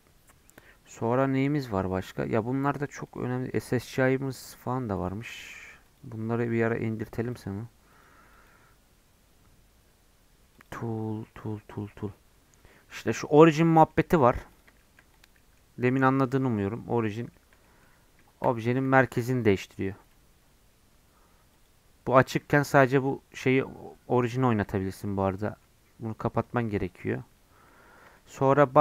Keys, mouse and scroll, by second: 1.3-1.7 scroll down 2, 1.7-3.0 scroll up 1, 3.0-13.5 drag, 13.8 middle click, 14.5 click, 14.7 shift+middle click, 15.1 click, 15.3 middle click, 16.3 click, 16.7-18.6 middle drag, 18.6 g, 21.5-22.5 drag, 22.5 g, 24.6-26.3 shift+middle drag, 26.3 click, 26.7-27.7 middle drag, 27.7 scroll down 4, 28.1-28.8 shift+middle drag.